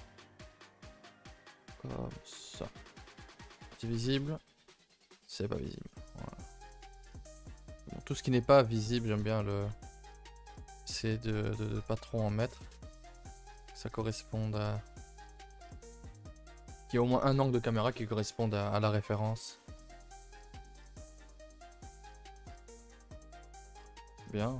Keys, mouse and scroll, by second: 0.2 g, 0.7 middle click, 1.4 g, 2.2 middle click, 2.7 g, 3.2 middle click, 3.5 KP_0, 4.6 scroll down 1, 4.7-5.7 shift+middle drag, 5.7-6.6 scroll up 6, 6.1 middle click, 6.6 shift+middle click, 7.0-7.4 scroll up 1, 7.4 middle click, 8.1 s, 9.9-11.4 middle drag, 11.4 g, 12.1 middle click, 12.4 a, 12.5 a, 12.9 ctrl+r, 13.9 g, 15.0-16.2 middle drag, 16.2 g, 19.5 click, 19.8 a, 19.9 a, 20.5 Tab, 20.8 a, 20.9 a, 21.0-21.8 middle drag, 21.8 scroll down 1, 22.0-24.5 middle drag.